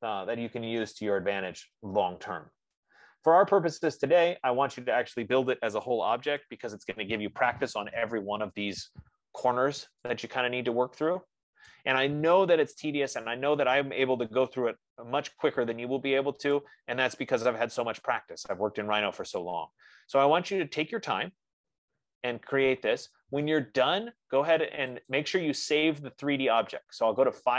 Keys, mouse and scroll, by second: 0.7 scroll, 3.7-4.1 scroll, 5.1 click, 5.9-6.8 typing, 9.5 middle click, 9.7 middle click, 9.8 middle click, 10.0 middle click, 10.6-10.9 scroll, 12.0 right click, 12.5-13.1 scroll, 15.6 middle click, 15.8 middle click, 16.1 middle click, 16.3 middle click, 17.7 right click, 19.0 middle click, 19.3 middle click, 20.6 F15, 24.9 F15, 25.5 click.